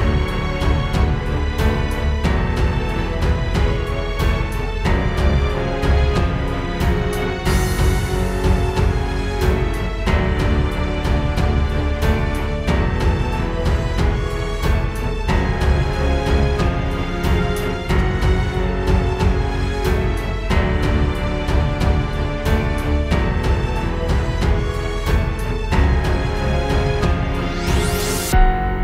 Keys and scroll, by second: 2.2 space, 4.3 space, 4.7 space, 5.4 space, 6.2 super+space, 6.4 super+space, 6.5 super+space, 8.6 super+z, 9.6 space, 10.4 alt+super+space, 11.1 alt+super+space, 11.3 alt+super+space, 23.5 space, 25.5 space, 26.1 space.